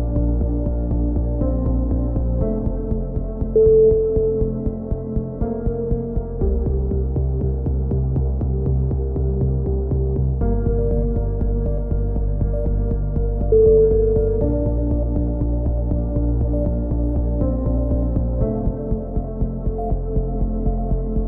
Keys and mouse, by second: 0.2 click, 1.2 a, 1.4 z, 1.6 click, 2.2-3.8 drag, 3.8 right click, 4.7 right click, 5.3 click, 6.4 KP_7, 6.8 z, 6.9 right click, 8.1 z, 8.2 z, 8.7-11.8 drag, 11.9 c, 12.4 right click, 12.7-13.7 drag, 13.9 z, 14.1 a, 14.3 click, 15.3 right click, 15.8 KP_7, 15.9 z, 16.6-17.6 drag, 17.7 a, 17.8 z, 17.9-18.9 drag, 18.5 right click, 19.2 click, 19.5 a, 19.6 Tab, 19.9 click, 20.5 KP_3.